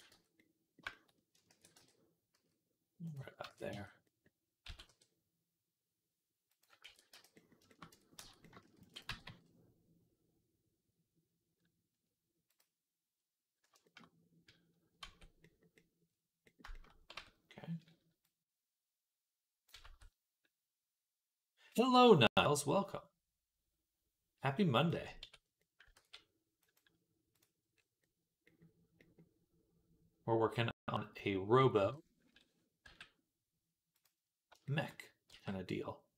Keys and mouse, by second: 1.3 ctrl+a, 1.6 d, 2.2 s, 3.3 ctrl+a, 4.5 s, 6.7 ctrl+a, 7.0 d, 7.7 Tab, 8.0 a, 8.6 shift+d, 8.9 g, 13.6-18.1 shift+middle drag, 14.8 Tab, 17.0 Tab, 18.1-33.8 drag, 19.6 a, 25.0 Tab, 25.8 ctrl+s, 26.5-33.8 middle drag, 26.5-36.1 right drag, 31.6 KP_3, 32.7 g, 35.1 r.